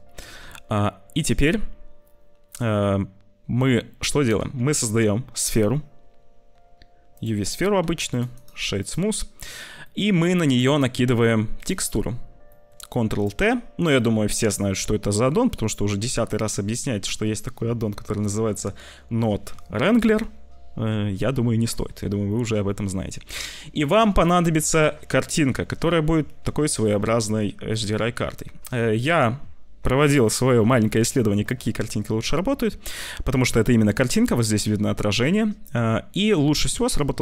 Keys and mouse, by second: 0.2 ctrl+s, 4.5 shift+a, 7.8 s, 8.4 click, 9.8 click, 10.4 click, 11.1 click, 11.5 click, 11.9 click, 12.4 click, 12.9 ctrl+t, 13.2 click, 15.9 click, 22.2 click, 27.6 click.